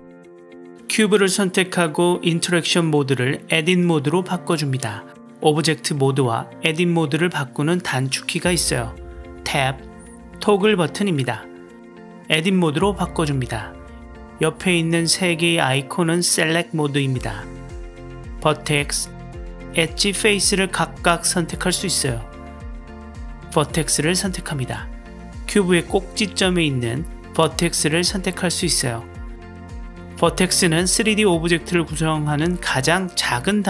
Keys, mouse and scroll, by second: 3.2-4.8 drag, 6.0-7.3 drag, 9.1 Tab, 16.8 click, 23.7 click, 27.9 drag, 29.1 click.